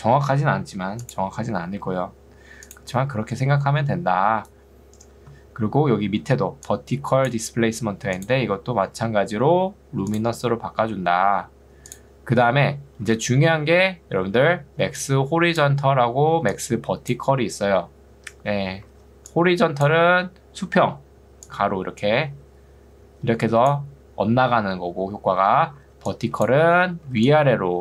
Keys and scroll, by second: 6.3 ctrl+2, 7.7 Escape, 13.1 ctrl+2, 18.1 Escape, 18.9 ctrl+2, 25.5 Escape, 25.9 ctrl+2, 26.7 Escape, 27.3 2.